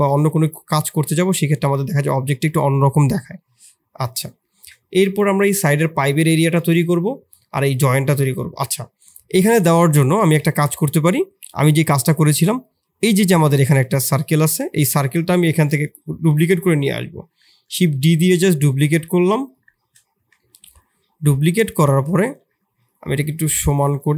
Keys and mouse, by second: 3.3-3.8 middle drag, 4.4 shift+middle click, 8.9 middle click, 9.9 middle click, 10.4 shift+click, 10.9 middle click, 11.5 click, 12.1 middle click, 13.6 g, 16.2 KP_3, 17.8 shift+d, 18.7 shift+drag, 19.0 g, 19.7 shift+click, 20.3 shift+click, 21.5 click, 22.1 alt+r, 22.8 click, 23.5 click, 23.8 alt+r.